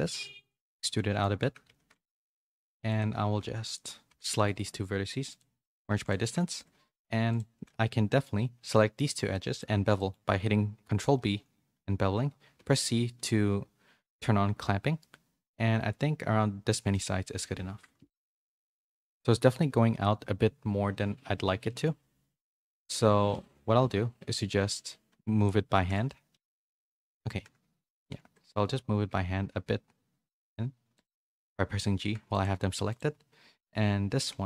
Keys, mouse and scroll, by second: 0.9 middle click, 1.6 2, 2.1 g, 2.9 click, 3.2 g, 4.0 1, 4.3 a, 4.4 right click, 5.9 2, 7.3 shift+click, 7.6 middle click, 8.7 middle click, 9.3 middle click, 9.9 middle click, 11.2 ctrl+b, 18.0 KP_1, 18.9 z, 26.3 ctrl+b, 32.0 Tab, 32.3 click, 34.3 z.